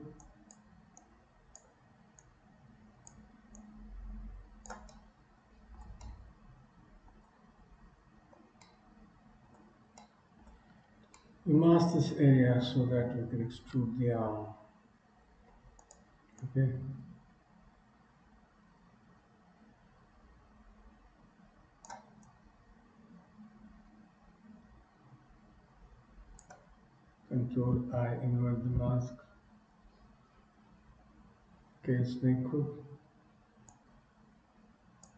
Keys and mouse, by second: 0.4 click, 1.1 click, 2.2-3.3 drag, 3.6-4.8 drag, 5.1 middle click, 6.1 middle click, 8.6-9.6 middle drag, 10.1 shift+middle click, 11.4 shift+middle click, 16.4-22.1 drag, 22.3-26.6 drag, 28.0 ctrl+i, 28.8 KP_3, 32.0 k, 33.8-35.1 drag.